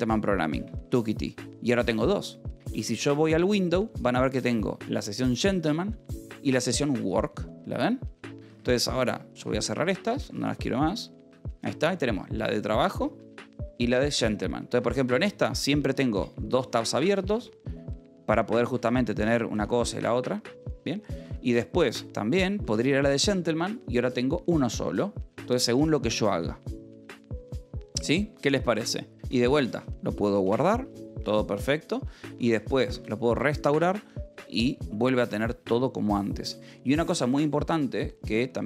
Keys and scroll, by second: 0.5 Return, 2.9 w, 4.3 k, 9.1-11.1 typing, 11.2 Escape, 12.9 j, 14.6 k, 15.3 Return, 16.8 ctrl+n, 17.3 ctrl+n, 18.8 n, 19.5 n, 21.7 ctrl+a, 21.9 w, 22.5 j, 22.7 Return, 30.2 ctrl+s, 33.3 ctrl+r, 37.4 ctrl+a.